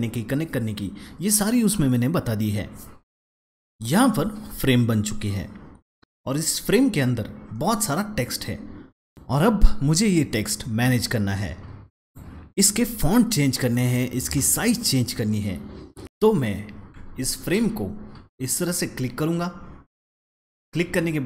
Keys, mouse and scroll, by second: 9.1 double click, 11.9 click, 18.2 click, 18.4 double click, 19.7-20.7 alt+scroll up 2, 20.7 right click.